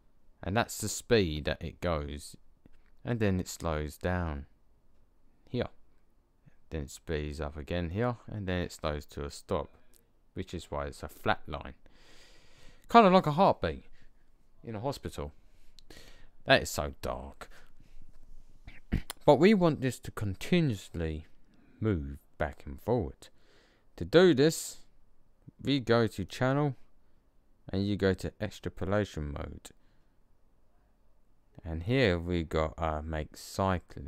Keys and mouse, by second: 26.2-27.6 drag.